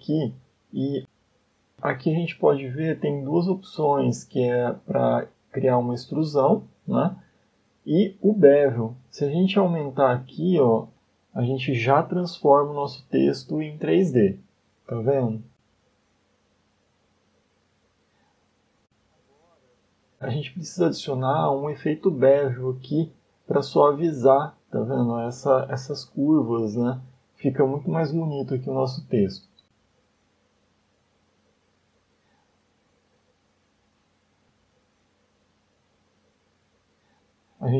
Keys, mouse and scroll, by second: 0.0-1.1 scroll up 2, 2.7 click, 11.3 click, 11.5-12.6 click, 11.7 click, 11.9 click, 12.7 click, 12.9-13.5 click, 13.2 click, 13.2 click, 14.0 middle click, 17.5 shift+middle click, 17.8 scroll up 2, 21.0 click, 21.2-21.8 click, 21.4 click, 21.5 click, 21.9 click, 22.7 click, 23.5-23.8 scroll up 4, 24.1 shift+middle click, 24.4 scroll up 1, 24.8 middle click, 29.2 click, 29.8 click, 30.5 click, 32.2 scroll down 2, 32.7 middle click, 34.1 middle click, 37.1 scroll down 2.